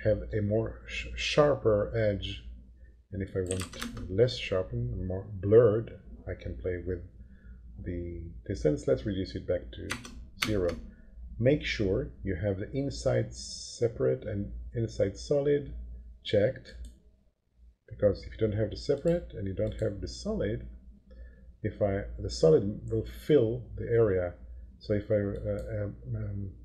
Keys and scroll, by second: 3.2-4.1 typing, 9.9 0, 10.3 Return.